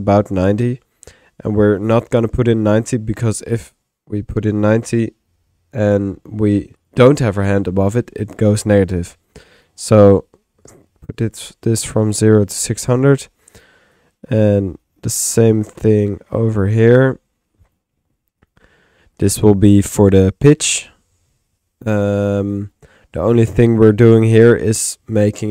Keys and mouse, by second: 4.0 typing, 4.3-10.0 drag, 12.8 click, 14.0-15.1 drag, 14.6 Tab, 14.6 typing, 15.8-16.5 typing, 16.0 click, 17.0 click, 17.7 click, 18.4 click, 19.2 click, 24.6 click.